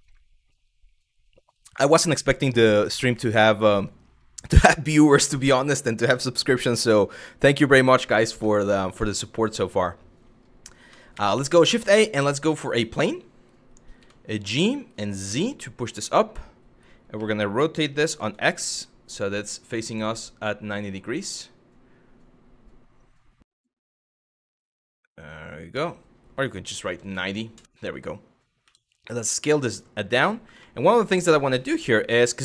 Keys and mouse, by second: 6.4 shift+middle drag, 8.7 shift+middle click, 10.8 shift+a, 13.6 g, 14.9 z, 15.5 click, 16.8 r, 26.5 KP_9, 26.6 KP_0, 27.2 Return, 28.3 s, 29.3 click, 30.3 shift+middle click.